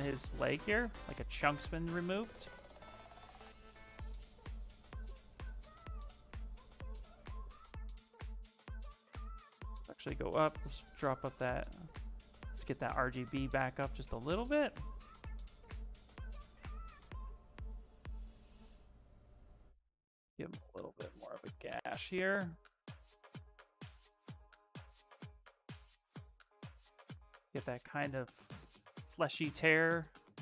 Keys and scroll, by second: 2.0 space, 5.2 ctrl+z, 9.6 space, 12.4 space, 14.5 s.